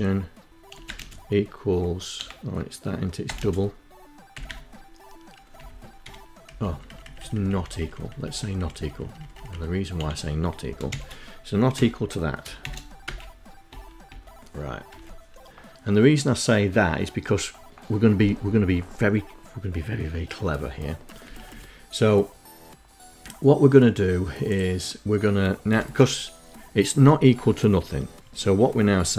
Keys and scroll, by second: 0.8 BackSpace, 2.0 space, 2.9 ', 4.2 Left, 4.6 Home, 5.3 Right, 5.5 Right, 5.7 Right, 5.9 Right, 6.3 Right, 6.6 Right, 6.9 Right, 7.2 Right, 7.4 Right, 7.5 Right, 7.7 Right, 8.0 Right, 8.1 Right, 8.6 Delete, 9.5 shift+1, 10.3 End, 11.6 Return, 12.3 Return, 12.7 Return, 13.5 Return, 19.8 Up, 24.3 Tab, 28.4-29.1 typing.